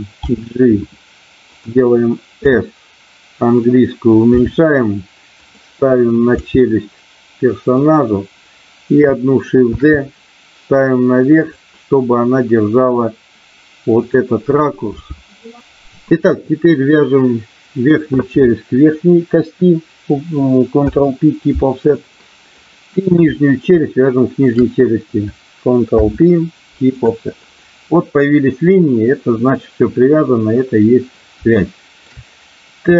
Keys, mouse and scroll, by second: 0.2 g, 2.4 s, 3.5 click, 4.4 r, 5.4 click, 6.4 g, 7.7 click, 9.6 shift+d, 11.4 click, 14.0 click, 14.9 g, 20.7 ctrl+p, 22.6 click, 24.4 shift+click, 26.0 ctrl+p, 31.5 shift+middle click.